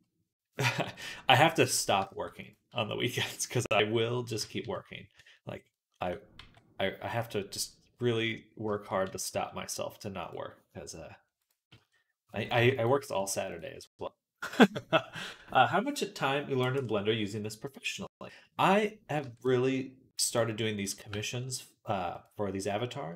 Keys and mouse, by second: 1.2 click, 1.9 shift+d, 4.4 KP_3, 6.2 g, 7.2 middle click, 7.5-12.0 middle drag, 9.0 e, 11.6 l, 12.0-21.0 drag, 12.4 p, 13.0 Tab, 19.0 Tab, 21.0 g.